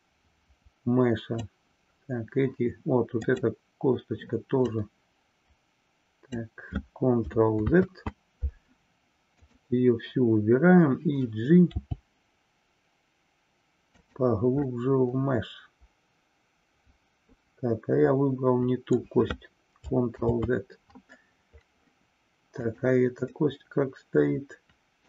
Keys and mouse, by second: 3.2 click, 4.6-6.4 drag, 7.5 ctrl+z, 9.4 click, 14.8-19.2 middle drag, 20.2 ctrl+z, 22.5 click, 23.5-25.0 middle drag.